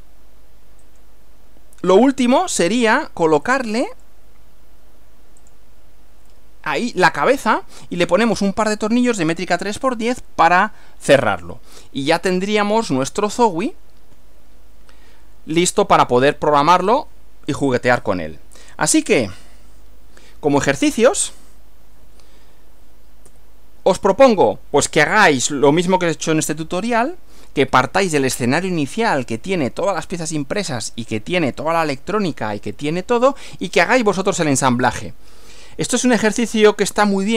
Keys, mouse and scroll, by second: 0.9 click, 3.5 click, 4.0 right click, 5.6 click, 6.4-8.0 middle drag, 11.4-13.4 middle drag, 13.3-21.3 scroll up 1, 21.3 click, 23.3 Right.